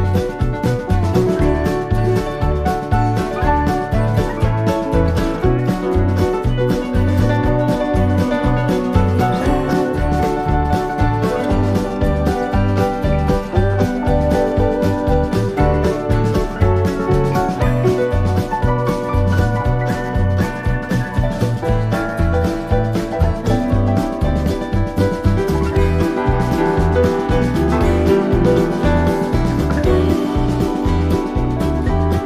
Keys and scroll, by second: 21.6 super+=.